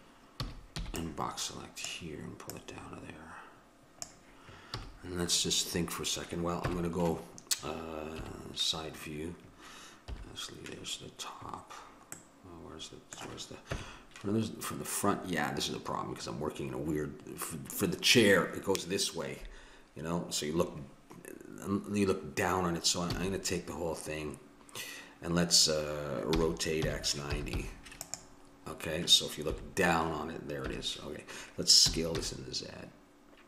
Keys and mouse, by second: 0.4 a, 0.8 b, 2.5-4.2 drag, 4.8 a, 6.6 KP_1, 8.4 KP_3, 10.2 KP_7, 13.7 KP_1, 23.1 a, 26.4 r, 29.5 KP_7, 30.6 KP_1, 31.8 s.